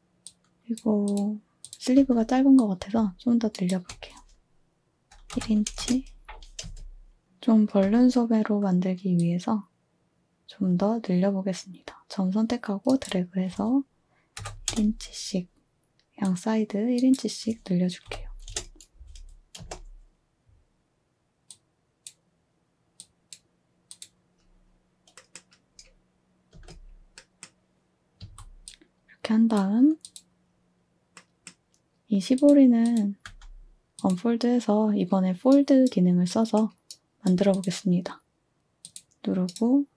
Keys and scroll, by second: 1.9 z, 3.4 typing, 5.3-6.6 typing, 7.8 z, 14.4 typing, 18.0 1, 19.5 space, 26.5 space, 28.2 a, 33.3 z.